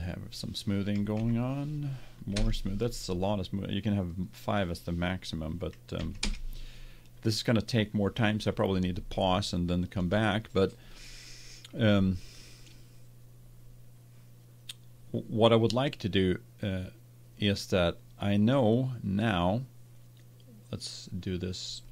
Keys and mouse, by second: 1.6 click, 4.1-6.9 drag, 21.8 click.